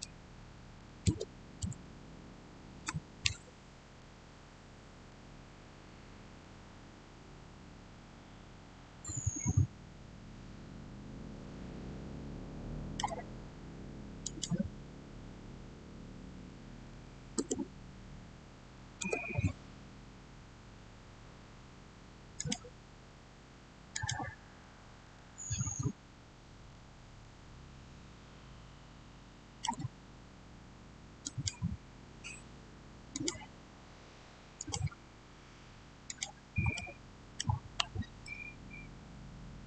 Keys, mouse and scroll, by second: 0.6 typing, 1.5 Return, 4.9 shift+Return, 6.2-14.1 shift+middle drag, 14.1 click, 16.2-16.7 typing, 17.2 Return, 22.2 click, 26.5 click, 27.1-31.1 shift+middle drag, 31.1-35.7 drag, 36.6-39.6 middle drag.